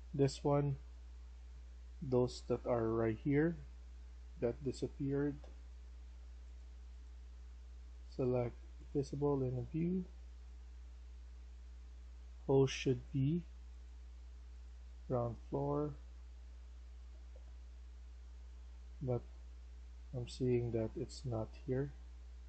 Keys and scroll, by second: 2.5-3.5 typing, 18.9 Escape, 19.2 Escape, 20.1 e.